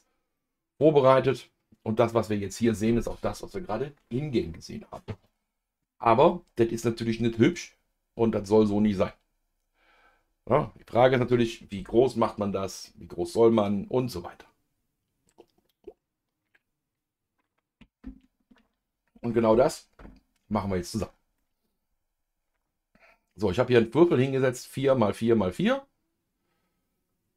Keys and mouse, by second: 0.4-2.1 middle drag, 6.3-8.4 middle drag, 21.4-27.3 middle drag.